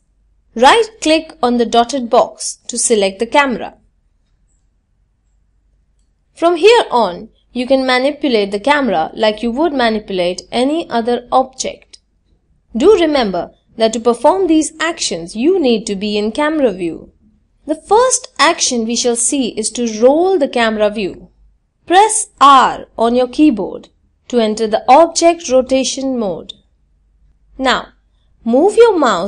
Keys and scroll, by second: 21.4 r.